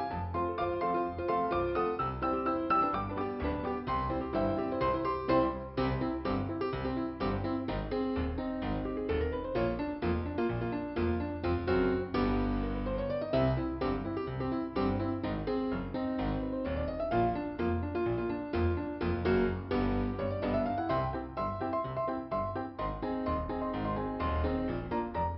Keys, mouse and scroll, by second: 5.4 click, 6.4 click, 9.8 Return, 11.5 scroll up 2, 12.2 click, 13.3 click, 14.3 click, 21.1-21.6 scroll up 1, 21.9 click.